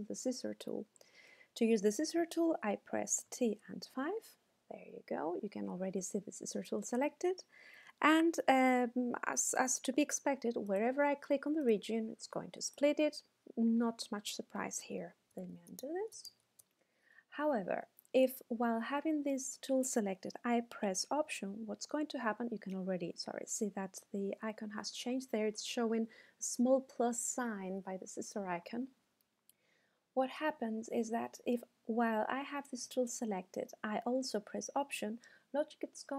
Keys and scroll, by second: 3.2 t, 3.7 5, 15.5 super+z.